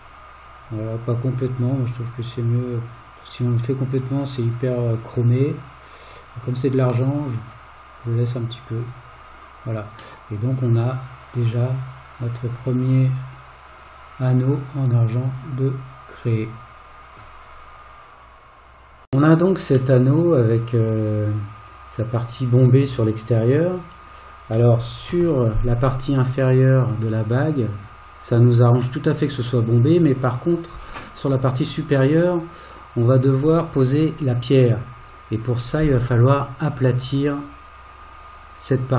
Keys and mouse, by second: 10.2-17.2 middle drag, 20.0-24.5 middle drag, 25.1 KP_1.